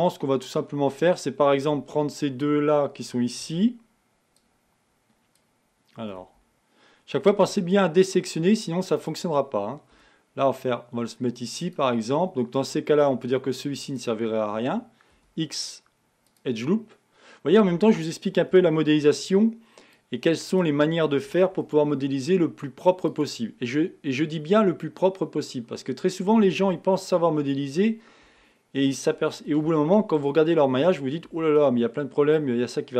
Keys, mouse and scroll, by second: 14.2 alt+click, 15.3 x.